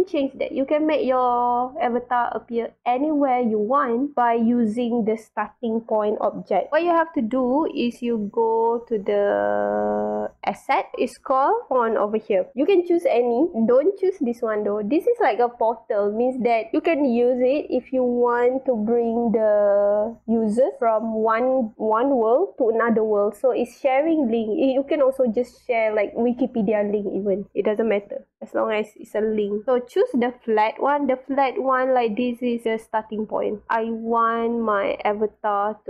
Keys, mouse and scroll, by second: 10.5 click, 15.3 click, 29.5 click, 33.5 drag, 33.9-35.2 right drag.